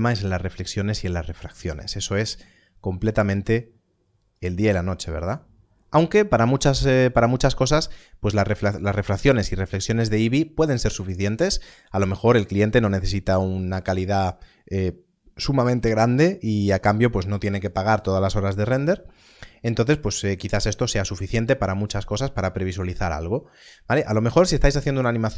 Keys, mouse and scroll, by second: 2.0 click.